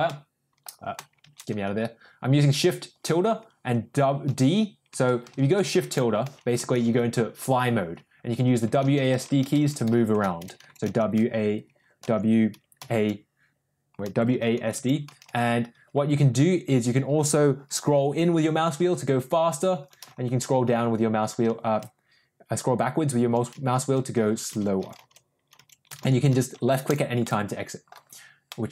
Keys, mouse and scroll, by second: 0.0 middle click, 1.2 shift+`, 6.4 shift+`, 27.1 middle click, 28.4-28.7 middle drag.